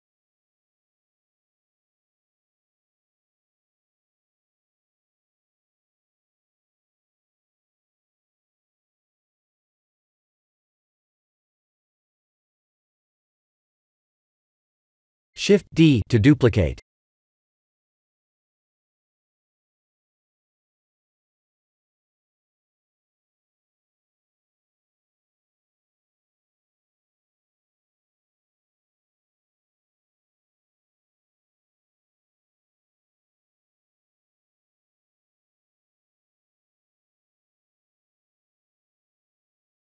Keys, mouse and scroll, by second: 0.4 shift+middle click, 0.6 shift+middle click, 1.0 s, 3.2 KP_1, 4.1-4.5 scroll up 2, 4.5 shift+z, 4.9 middle click, 5.1 middle click, 5.2 middle click, 5.3 shift+z, 5.7 middle click, 5.9 middle click, 6.5-7.1 scroll down 3, 7.1 click, 7.7 middle click, 8.3 middle click, 8.5 middle click, 8.6 middle click, 9.2 middle click, 9.7 middle click, 10.3-10.8 scroll down 3, 10.8 middle click, 11.1 middle click, 11.1 middle click, 11.6-12.1 scroll up 1, 12.1-12.6 scroll up 1, 12.9 click, 13.6 shift+click, 14.4 click, 15.5-15.9 scroll down 2, 20.3 KP_1, 22.8 shift+d, 25.6 s, 27.2 shift+z, 28.1 g, 32.4-33.5 scroll down 4, 34.4 click, 35.6 shift+z, 37.3 scroll up 1, 38.0 middle click, 38.9 middle click, 39.5 middle click.